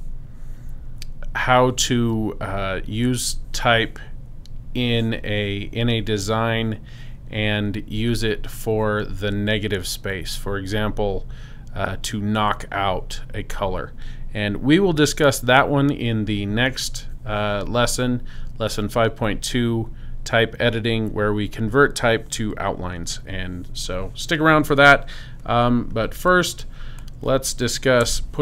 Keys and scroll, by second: 28.0 super+BackSpace.